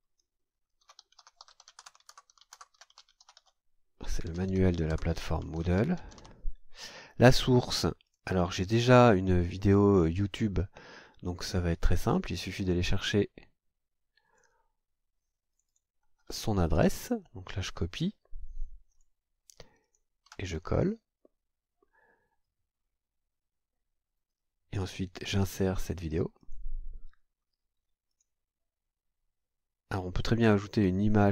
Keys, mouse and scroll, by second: 0.6-6.7 typing, 7.2 scroll down 1, 8.0 click, 14.2 click, 15.5 click, 16.7 ctrl+c, 18.9 click, 19.8 ctrl+click, 20.2 ctrl+v, 22.8-23.2 scroll down 2, 26.4 click, 28.1 click.